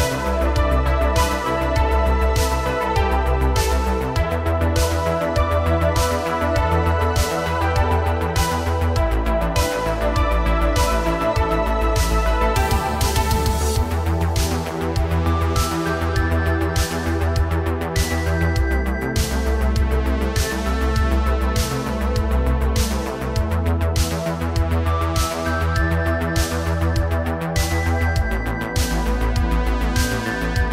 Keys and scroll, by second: 2.1 ctrl+shift+v, 6.2 ctrl+v, 8.3 space, 12.8 space, 24.6 shift+d, 27.4 space, 28.1 space, 30.2 space.